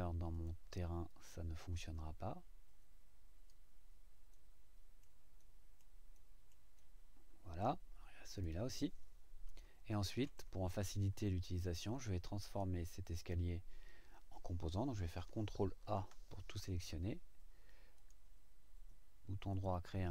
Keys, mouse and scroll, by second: 0.3 click, 1.1-3.7 drag, 4.3-5.2 middle drag, 5.4 middle click, 6.1 right click, 6.8 right click, 8.3 click, 9.6 shift+right click, 12.4 click, 15.8 ctrl+a, 17.9 right click, 19.5 click.